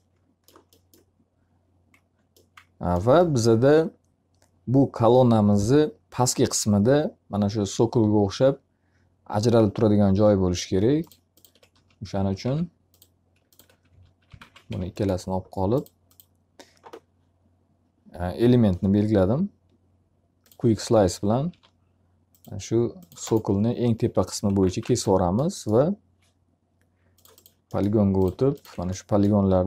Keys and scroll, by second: 11.2 d, 12.4 q, 13.6-14.9 typing, 21.0 s, 24.3 x, 24.6 z, 24.8 alt+a.